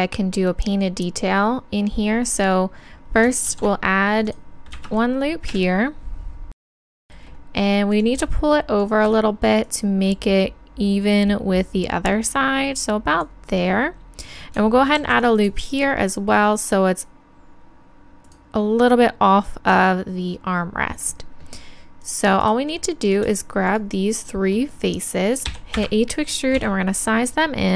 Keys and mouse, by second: 3.5 ctrl+r, 5.5 KP_1, 7.9-9.7 drag, 9.7-11.4 middle drag, 11.4 click, 15.0 ctrl+r, 18.3-20.5 drag, 22.0-23.1 drag, 24.5-25.8 right drag, 26.6 s.